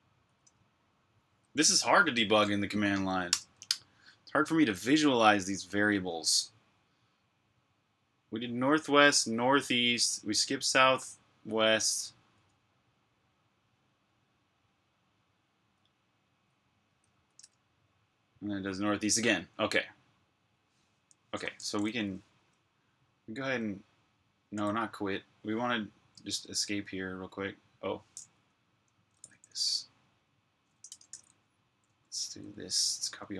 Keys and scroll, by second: 3.2 Return, 16.8 Up, 23.3 q, 24.5 BackSpace, 26.2 ↺, 28.4-29.4 typing, 30.7-32.3 typing.